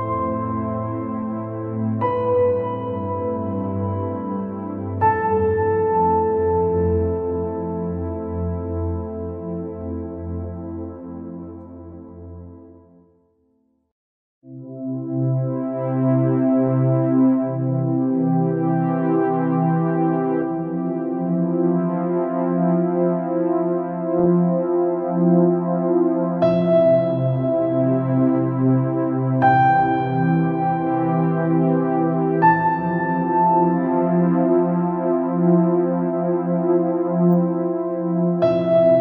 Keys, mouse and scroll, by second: 0.1 click, 0.9 click, 1.4 click, 1.9 click, 3.6 g, 7.4-8.4 drag, 9.5 click, 10.1 click, 10.8-11.4 scroll up 3, 11.5 click, 12.0-12.4 scroll down 3, 12.9 click, 15.0 g, 17.2 click, 21.1 click, 23.3 click, 23.8 click, 25.3 click, 26.3 click, 33.0 click, 34.1 click, 36.5 click, 37.1 click.